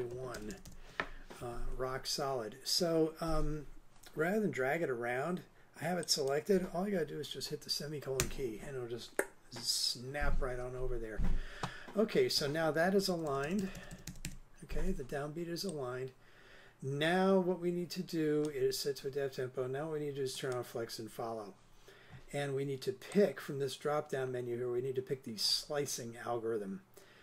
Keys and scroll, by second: 0.3 super+Left, 8.2 ;, 13.1 super+Right.